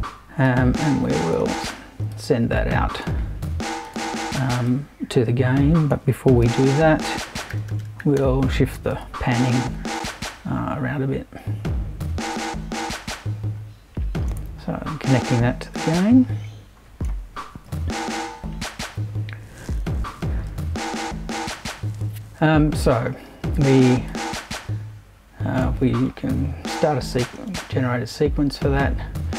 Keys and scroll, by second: 6.4 super+i, 7.3-9.4 typing.